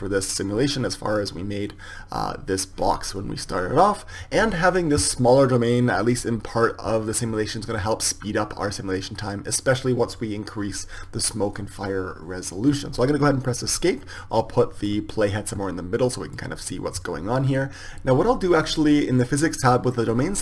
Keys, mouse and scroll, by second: 14.1-20.0 drag.